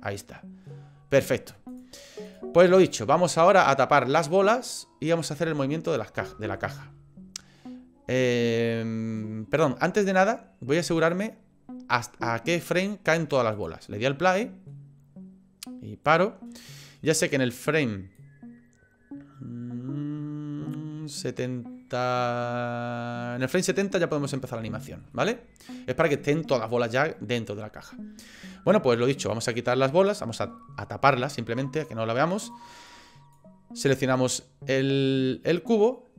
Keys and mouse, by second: 0.0 middle click, 1.7 click, 2.2 click, 2.8 middle click, 5.3 click, 6.3 shift+middle click, 11.0 click, 13.6 click, 14.2 middle click, 16.1 click, 16.5 middle click, 18.1-23.4 drag, 23.9 middle click, 24.8 shift+middle click, 25.1 middle click, 29.3 click, 31.8 click, 32.9 click, 34.0 click, 34.8 middle click, 35.2 click, 35.2 right click.